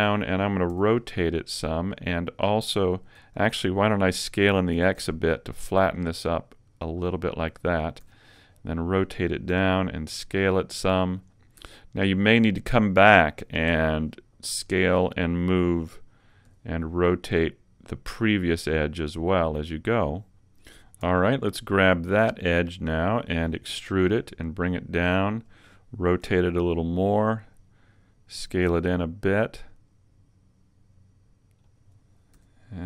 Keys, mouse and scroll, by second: 0.0 click, 0.8 r, 2.0 click, 3.2 z, 4.8 s, 7.4 click, 8.0 r, 9.2 click, 9.5 s, 11.2 click, 12.4 alt+right click, 13.8 r, 15.2 click, 16.5 g, 19.6 click, 22.0 alt+right click, 23.8 e, 25.4 click, 26.2 r, 27.0 click, 27.0 r, 27.3 click, 28.7 s, 31.8 click, 32.4 r.